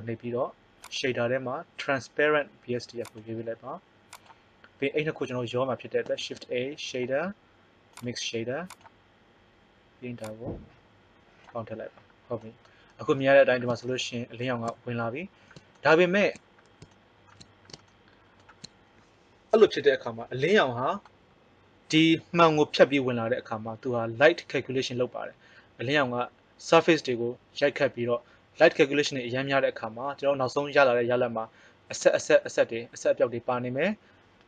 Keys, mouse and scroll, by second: 6.1 shift+a, 8.8-11.9 drag.